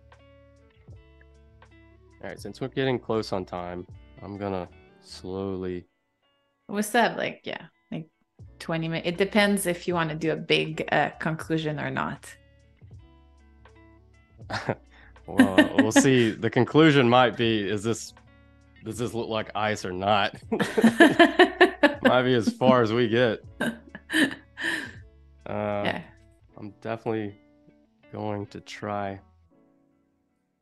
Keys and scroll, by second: 0.9 super+=, 1.5 space, 2.8 z, 3.3 a, 5.0 shift+b, 10.9 super+y, 13.9 super+y, 14.8 super+z, 20.3 space, 21.9 a, 24.4 i, 25.3 a, 27.0 a, 28.7 shift+b.